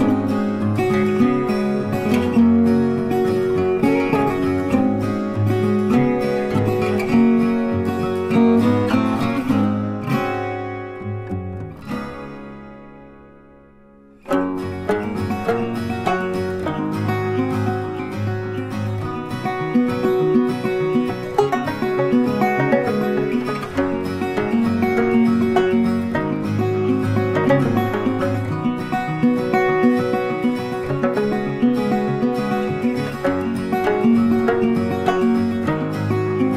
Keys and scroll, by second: 28.6 ctrl+t.